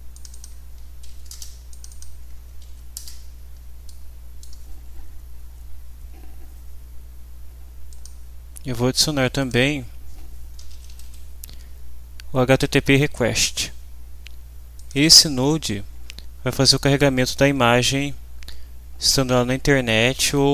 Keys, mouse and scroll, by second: 0.1 click, 0.7 0, 1.3 Return, 1.7 click, 2.3 0, 2.9 Return, 3.9-6.7 middle drag, 3.9-4.6 scroll up 2, 4.6-6.7 scroll up 1, 7.9 click, 9.4 click, 10.3-11.5 typing, 14.7 click.